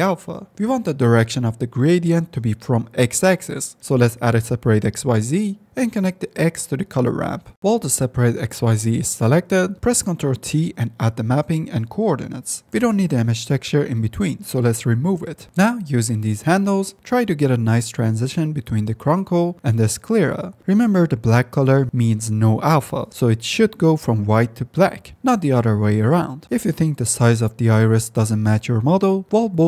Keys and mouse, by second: 1.3 shift+a, 1.9-3.9 middle drag, 5.1 click, 5.5 click, 6.6 drag, 7.5 shift+a, 10.2 ctrl+t, 12.3-12.9 drag, 14.5 x, 19.1-22.4 drag, 24.6 drag, 25.5 drag, 27.0 click, 28.3 click.